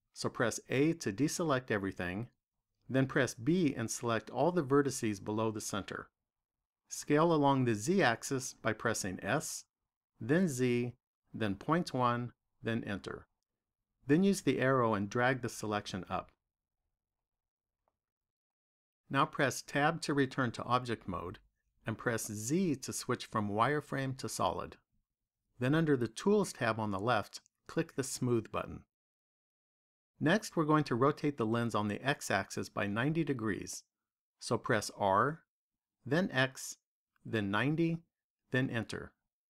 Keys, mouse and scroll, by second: 0.7 a, 2.8 b, 9.1 s, 15.4 click, 19.9 Tab, 22.3 z, 27.5 click, 34.8 r.